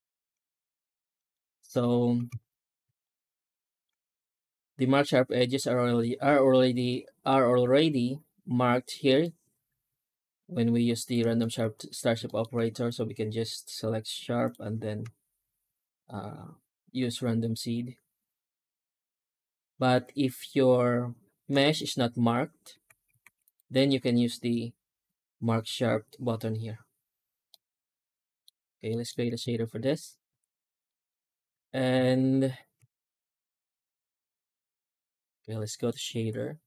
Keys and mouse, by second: 1.0 right click, 1.4 Tab, 2.1 alt+a, 2.9 shift+middle click, 4.3 middle click, 9.1-11.0 middle drag, 11.2 shift+middle click, 11.6 Tab, 12.1 shift+middle drag, 12.4 shift+q, 21.6 right click, 21.9 Tab, 22.8 Tab, 23.1 shift+q, 27.4 middle click, 28.8 shift+middle drag, 29.4 ctrl+s, 30.7 middle drag, 31.3 ctrl+space, 31.9 ctrl+s, 35.7-36.1 drag.